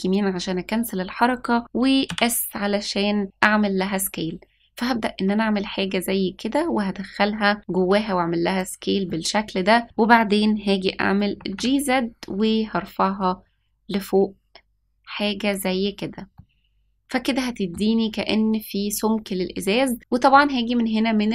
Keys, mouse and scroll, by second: 2.0 s, 2.5 s, 9.0-9.8 middle drag, 11.3 g, 16.3-17.7 middle drag.